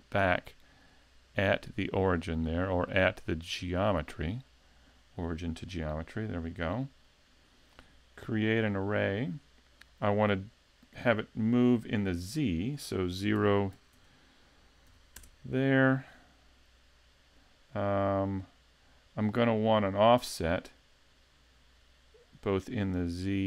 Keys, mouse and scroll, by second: 0.9 click, 2.3 click, 6.3 click, 12.4 click, 14.0 Tab, 20.2 click, 22.6 click.